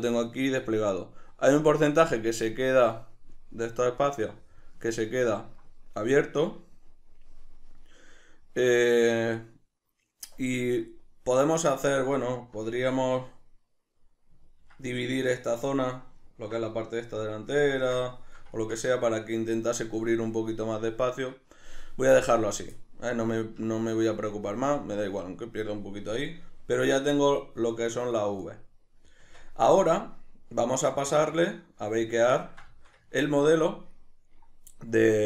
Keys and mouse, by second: 4.0 click, 4.9 ctrl+middle click, 10.3-24.0 middle drag, 24.1-31.1 shift+middle drag, 29.2 Tab, 31.1-32.4 drag, 32.4-35.2 ctrl+middle drag.